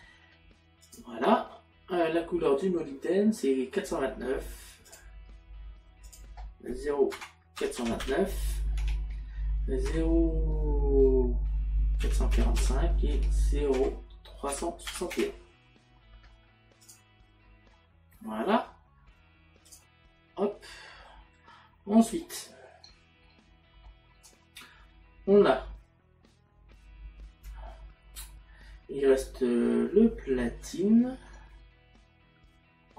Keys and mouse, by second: 6.1 click, 7.2 KP_Decimal, 8.8 Tab, 9.9 KP_Decimal, 13.1 Tab, 16.9 click, 20.5 middle click, 22.0 middle click, 23.3 middle click.